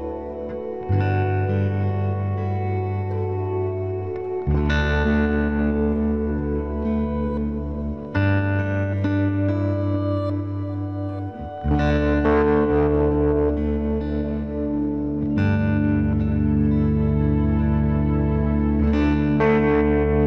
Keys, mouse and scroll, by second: 1.7 k, 1.8 middle click, 8.1-14.2 middle drag, 14.3-15.9 right drag, 15.9 KP_Decimal, 17.7 ctrl+s, 19.6 c.